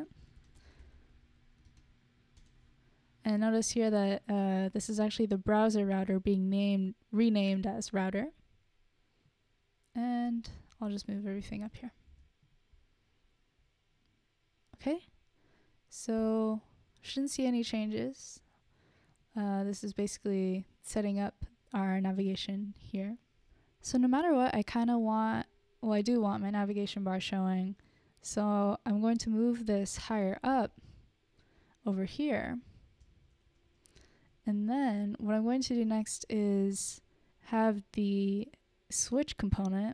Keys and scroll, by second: 0.6 Return, 0.8-2.9 typing, 3.0 Return, 11.4 super+x, 11.7 Down, 12.3 super+v, 12.8 super+s, 29.6 super+x, 30.6 Return, 31.2 super+v, 33.9 BackSpace, 34.0 BackSpace, 34.1 BackSpace, 34.3 BackSpace.